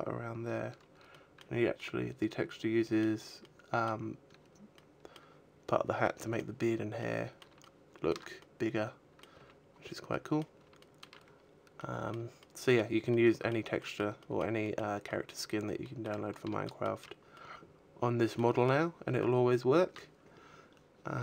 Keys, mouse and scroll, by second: 0.7 middle click, 1.3 middle click, 3.0 middle click, 4.2 middle click, 5.6 middle click, 6.4 middle click, 7.1 shift+middle click, 8.0 middle click, 8.9 a, 9.3-9.7 scroll down 2, 9.7 middle click, 10.3 shift+middle click, 11.0 scroll down 2, 11.6 middle click, 12.9 middle click, 13.3 middle click, 14.2 middle click, 14.6 middle click, 15.4 middle click, 16.2-16.9 shift+middle click, 16.9 middle click.